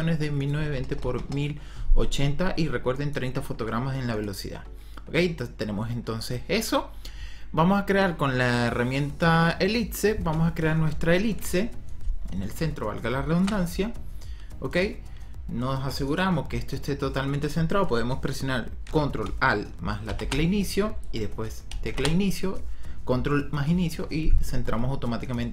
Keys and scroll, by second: 0.0-1.1 typing, 21.8 ctrl+Home.